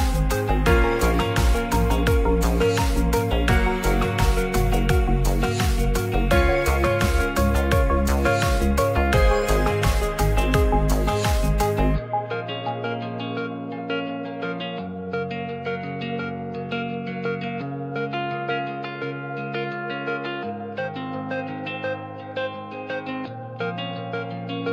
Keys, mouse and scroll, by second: 1.8 g, 2.3 click, 2.8 ctrl+a, 3.3 middle click, 5.8 Tab, 6.4 ctrl+r, 8.6 click, 10.2 ctrl+r, 11.8 middle click, 12.4 click, 13.0 click, 14.6 Tab, 15.0 Tab, 15.1 middle click, 15.5 Tab, 16.3 Tab, 16.6 middle click, 17.5 1, 20.1 click, 22.5-23.3 drag.